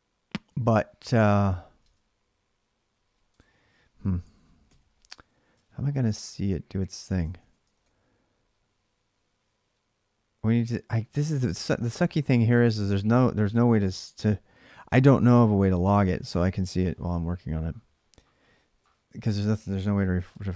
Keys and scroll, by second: 1.6 alt+Tab, 3.9 ctrl+a, 4.4 ctrl+a, 5.3 ctrl+[, 5.4 ctrl+j, 5.8 k, 7.0-8.1 typing, 18.6 ctrl+Tab.